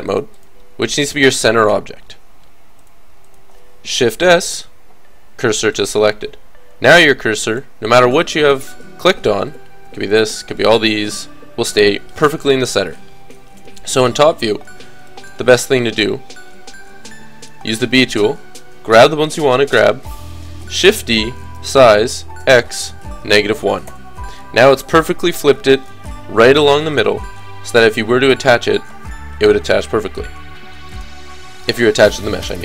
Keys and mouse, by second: 1.7 KP_7, 4.2 shift+s, 9.5-12.5 drag, 12.5 KP_7, 13.2 click, 13.9 a, 14.8 b, 15.5-17.3 drag, 15.5 b, 17.4 click, 20.8 shift+d, 25.2-27.0 middle drag, 27.0 click, 30.9-32.6 middle drag.